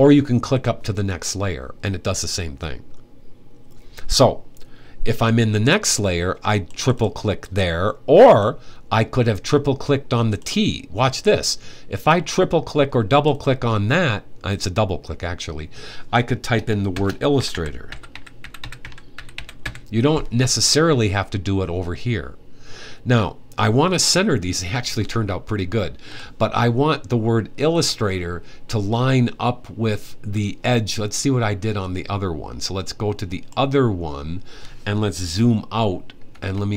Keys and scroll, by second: 16.7-19.9 typing.